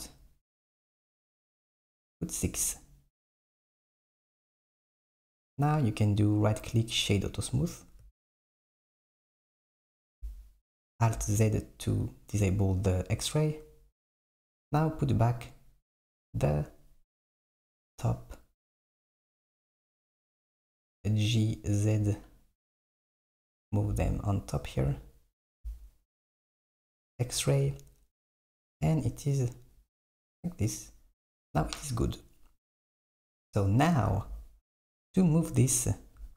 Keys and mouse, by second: 6.4-8.1 right drag, 9.9 alt+z, 15.6 click, 17.2 click, 18.1 click, 20.3 g, 24.0 KP_1, 26.8 alt+z, 34.2 alt+z.